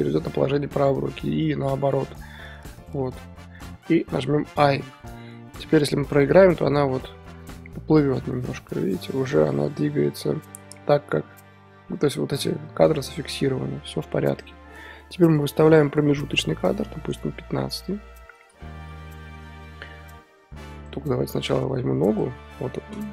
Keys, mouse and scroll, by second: 2.1 right click, 3.0-4.5 middle drag, 6.1-6.9 drag, 6.9-9.9 middle drag, 14.2-17.6 drag, 17.6 KP_3, 19.1-20.7 shift+middle drag, 20.7-22.2 drag, 23.0 scroll up 2.